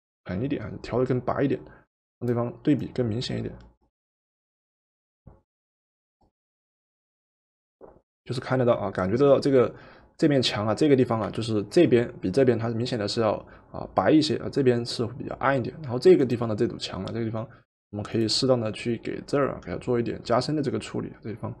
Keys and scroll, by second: 11.3 v.